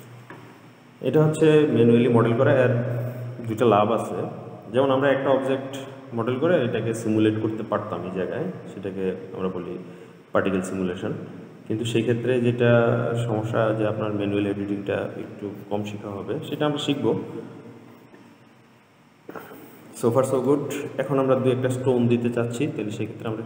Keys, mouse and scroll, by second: 20.6 click.